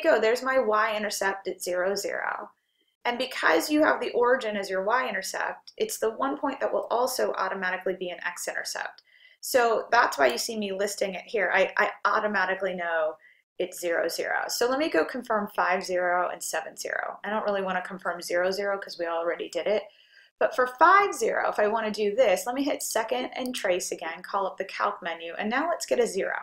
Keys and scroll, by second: 2.0-2.7 typing, 22.5-23.3 typing.